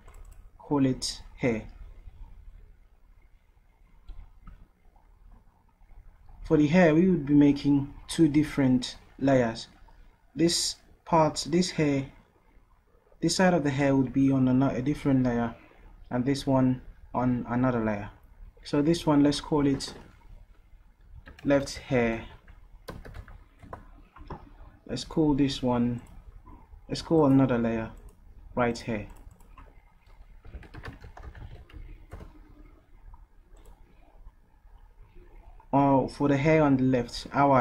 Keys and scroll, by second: 20.9-23.6 typing, 23.7 Return, 30.3-32.3 typing.